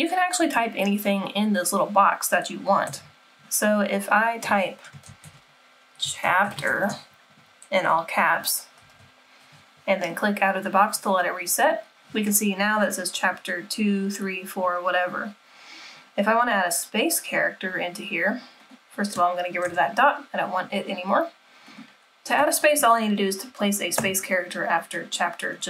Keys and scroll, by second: 9.1 super+-, 9.1 typing, 19.7 BackSpace.